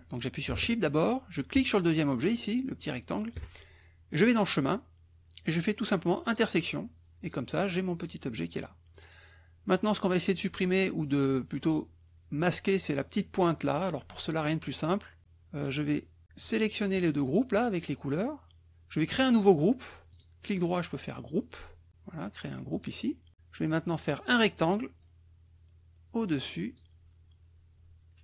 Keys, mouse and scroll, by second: 1.5 shift+click, 4.1 click, 6.3 click, 7.2 click, 8.9 click, 9.9 click, 16.4 click, 17.2 shift+click, 20.1 right click, 22.8 click, 24.1 click, 25.0-26.9 drag.